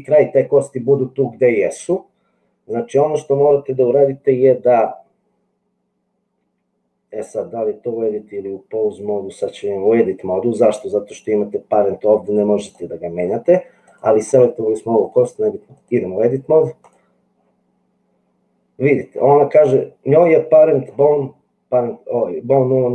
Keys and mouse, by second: 12.2 click, 15.1-16.1 drag.